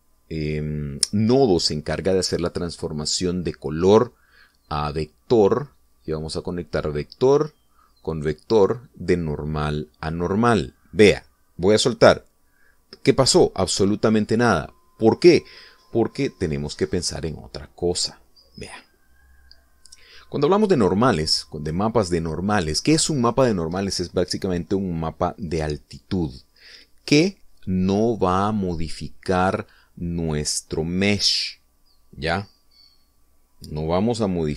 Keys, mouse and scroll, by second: 6.4-13.7 drag, 14.6-14.9 scroll up 1, 23.3-24.9 drag.